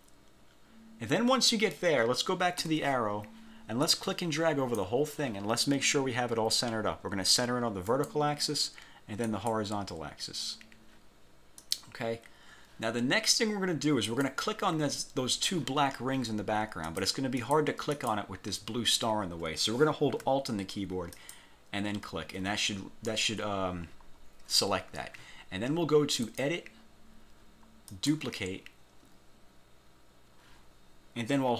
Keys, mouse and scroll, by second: 2.7 F1, 4.0-5.1 drag, 8.0 click, 9.4 click, 11.7 click, 14.2 click, 17.0 click, 17.5 click, 18.1 click, 21.3 alt+click, 26.4 click, 28.0 click.